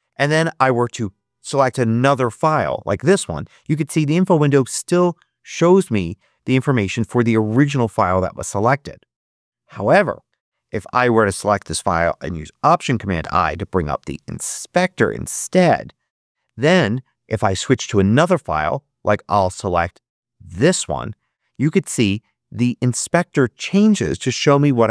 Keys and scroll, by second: 13.1 alt+super+i.